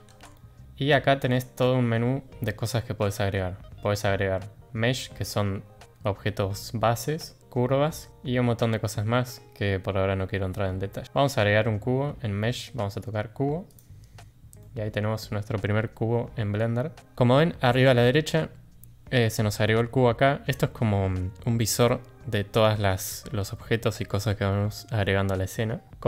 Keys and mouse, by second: 14.6 middle click.